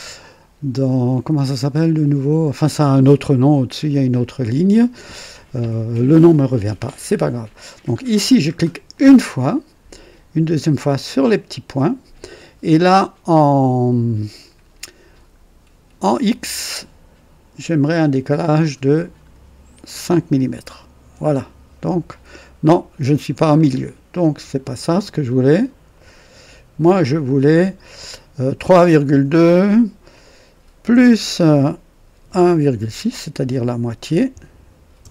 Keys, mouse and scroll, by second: 8.8 click, 11.1 click, 18.5 click, 20.0 KP_5, 20.9 KP_Enter, 24.7 click, 25.9 click, 27.2 click, 28.5 KP_3, 28.7 KP_Decimal, 29.0 KP_2, 30.8 KP_Add, 32.2 KP_1, 32.7 KP_Decimal, 34.9 Return.